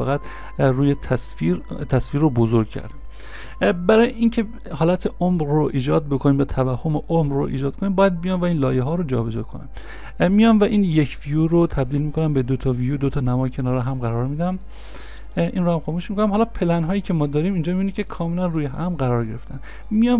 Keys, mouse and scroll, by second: 2.9 ctrl+z, 13.5 ctrl+z.